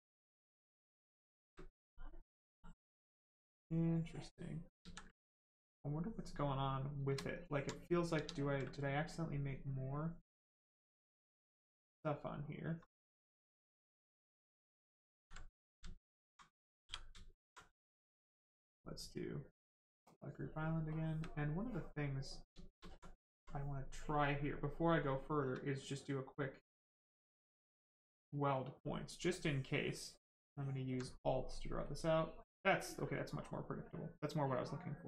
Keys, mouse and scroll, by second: 0.8 space, 1.3 click, 1.3 space, 2.1 click, 4.8 ctrl+z, 5.1 right click, 6.9 shift+right click, 7.2 alt+right click, 7.7 right click, 7.7 right click, 8.1 ctrl+z, 8.7 right click, 9.9 click, 12.7 click, 14.2 right click, 15.1 ctrl+z, 15.3 right click, 15.9 alt+right click, 16.8 right click, 17.9 space, 20.1 space, 20.9 click, 20.9 space, 22.0 right click, 22.5 shift+right click, 22.8 alt+right click, 24.3 shift+right click, 24.5 shift+click, 28.3 click, 29.3 alt+click, 31.1 right click, 31.2 right click, 31.8 click.